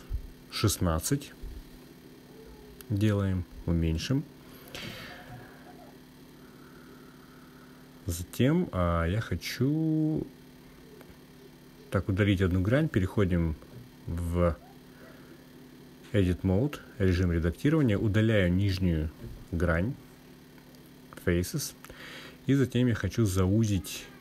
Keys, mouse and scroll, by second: 1.5 click, 2.8-6.5 drag, 7.8 click, 12.5-13.9 drag, 15.7-17.3 drag, 18.3 click, 19.4 click, 22.3 Delete.